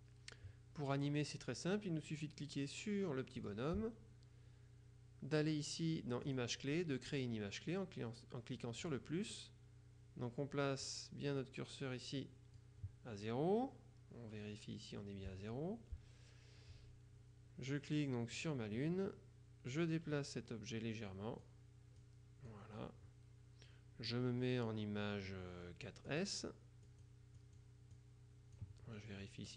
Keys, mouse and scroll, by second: 3.5 click, 6.4 click, 8.9 click, 11.0 click, 18.5 click, 20.2-22.0 drag, 22.6 click, 26.2 click, 27.0 click, 28.0 click.